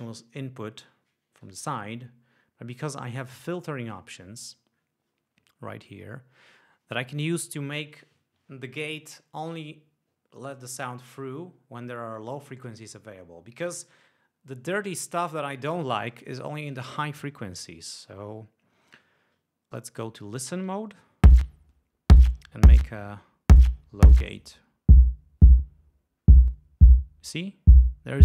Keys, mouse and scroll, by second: 20.2 click, 21.4 l, 22.5-24.8 drag, 26.6-27.8 drag.